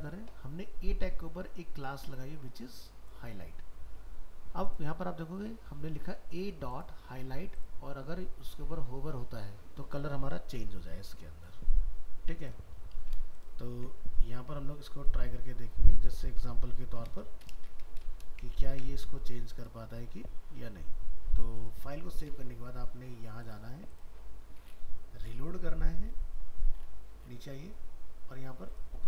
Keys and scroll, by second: 13.7 ctrl+s, 18.7 ctrl+s, 22.0 alt+Tab.